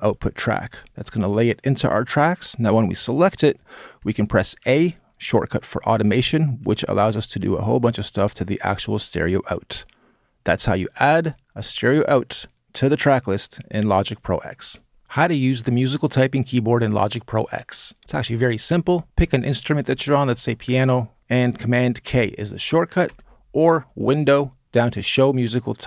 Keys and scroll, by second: 4.4 a, 5.8 a, 21.8 super+k, 22.8 super+k.